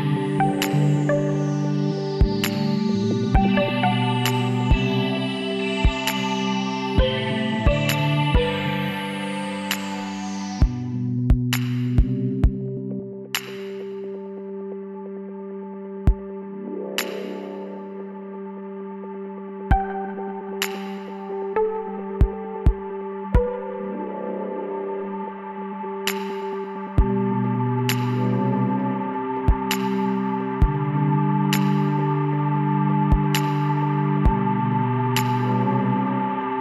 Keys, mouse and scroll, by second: 9.4 click, 9.6-11.2 middle drag, 10.7 w, 16.3-19.3 middle drag, 19.3 Tab, 21.5 KP_1, 22.1 middle click, 23.0 Tab, 24.4 l, 25.8-27.6 drag, 27.6 middle click, 29.4-31.0 drag, 35.7-36.6 middle drag.